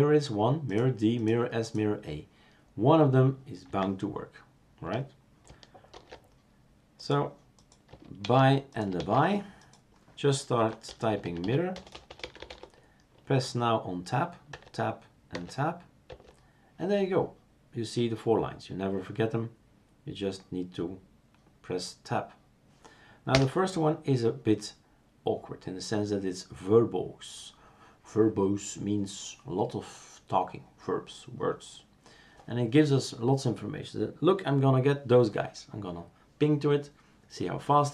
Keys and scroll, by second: 5.9 super+f, 6.0 super+f, 8.3 shift+super+q, 9.0 shift+super+q, 10.4-12.1 typing, 13.3-14.1 typing, 14.6 Tab, 16.1 Tab.